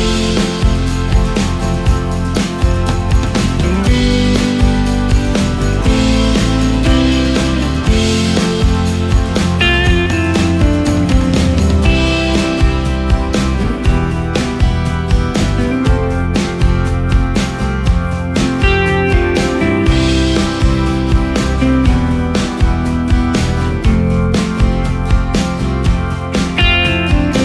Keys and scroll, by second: 0.4 typing, 14.8 typing, 25.8 ctrl+space.